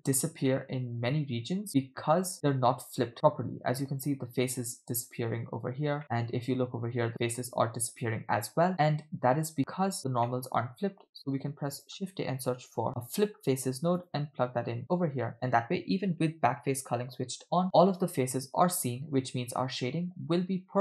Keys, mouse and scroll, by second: 0.6 middle click, 1.7-2.3 middle drag, 2.6 middle click, 2.6 scroll down 1, 6.0 middle click, 6.7 scroll up 1, 8.7 middle click, 8.7-9.1 scroll down 3, 9.3 scroll up 1, 10.1 scroll down 1, 10.3 middle click, 11.2 shift+a, 15.3-20.8 middle drag.